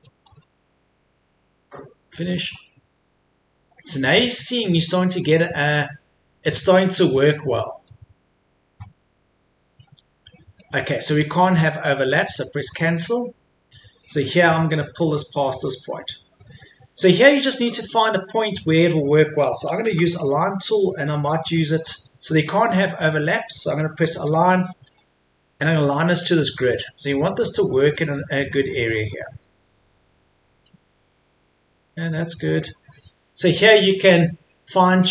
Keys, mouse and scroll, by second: 0.2 Escape, 0.7-1.2 scroll up 1, 1.2-2.1 scroll down 1, 2.1 click, 3.9-4.5 scroll up 1, 4.9-5.3 scroll down 1, 7.3 click, 14.4-15.4 scroll up 1, 15.4-16.6 drag, 17.1 scroll down 1, 17.4 click, 17.7-19.9 scroll up 1, 19.9 typing, 21.3 scroll down 1, 21.5 Escape, 22.5-23.0 scroll up 1, 24.9 click, 26.3 scroll down 1, 26.5 Escape, 27.9-32.3 drag, 32.3 Escape, 33.7 click.